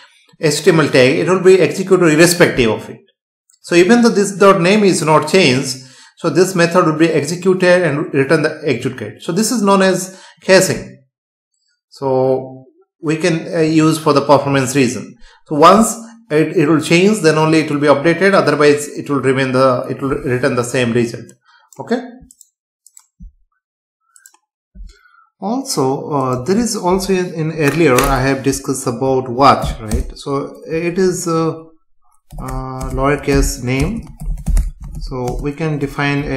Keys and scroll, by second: 29.9 Return, 32.8 BackSpace, 35.3 space.